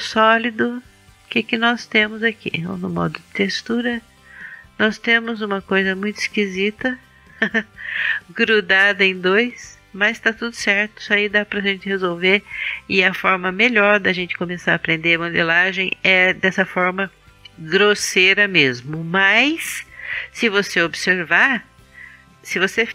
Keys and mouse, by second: 1.1 click, 6.3-10.3 middle drag, 11.5 click, 14.7-15.8 middle drag, 16.1-19.0 middle drag, 19.0 KP_1.